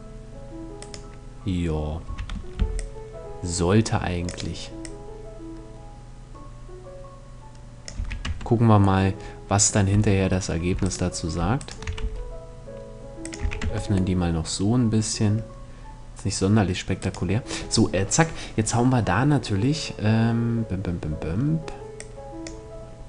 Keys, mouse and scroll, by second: 0.4-2.1 right drag, 1.6 a, 2.1 c, 2.3-3.9 middle drag, 4.3-6.1 drag, 4.3-5.8 right drag, 7.5 a, 7.8 Tab, 8.6 middle click, 9.4 Tab, 10.4-12.8 right drag, 11.5 s, 12.8-13.9 drag, 13.0 a, 13.2 Tab, 16.5-18.2 right drag, 21.5-23.0 drag.